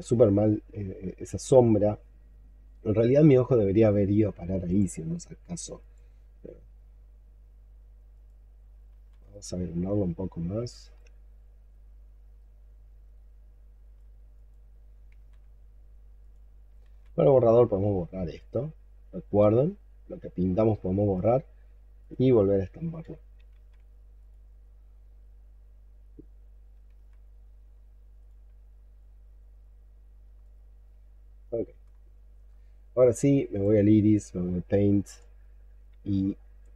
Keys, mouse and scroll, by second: 0.7 alt+scroll down 1, 0.8 alt+middle click, 8.8 ctrl+z, 9.2 ctrl+right click, 12.2 ctrl+right click, 15.0 ctrl+z, 18.4 ctrl+right click, 19.4 ctrl+click, 23.4 ctrl+z, 26.8 ctrl+z, 29.1-30.1 scroll down 18, 30.3 alt+click, 32.0-33.6 scroll up 10.